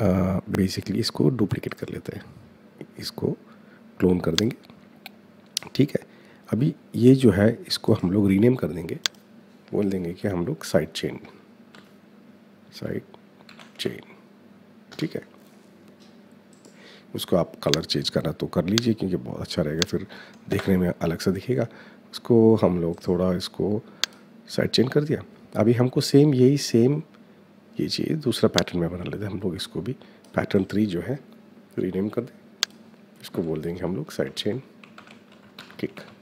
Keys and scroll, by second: 11.0-14.3 typing, 14.6 Return, 20.2 Return, 33.0-36.2 typing.